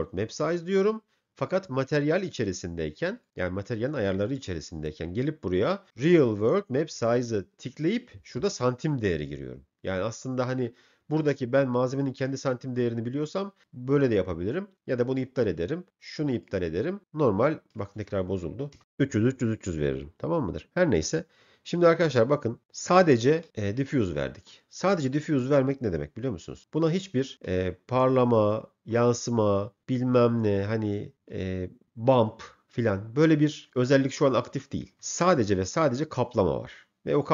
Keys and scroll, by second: 0.5 m, 18.5 3, 18.8 Return.